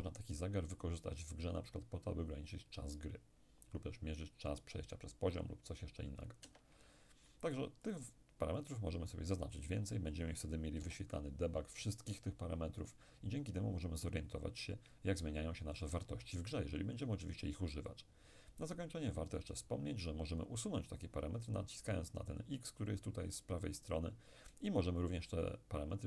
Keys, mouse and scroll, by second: 6.5 Escape, 7.9-10.6 drag, 10.8 p, 15.9 Escape, 23.8 click.